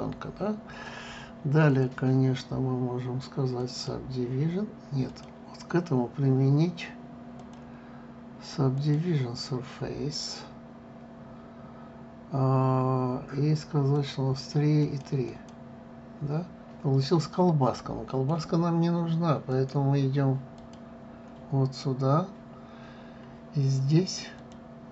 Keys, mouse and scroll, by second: 2.3-5.4 drag, 5.7 click, 8.0-11.1 drag, 14.7 click, 15.5-17.0 drag, 17.7-20.2 middle drag, 20.2-23.2 drag, 23.6-24.9 scroll up 1.